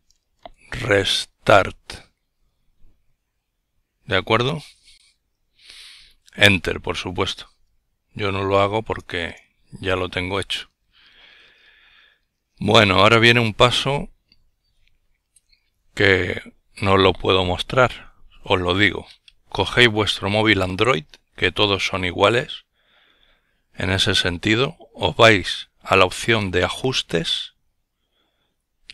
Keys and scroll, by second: 0.0-1.6 typing.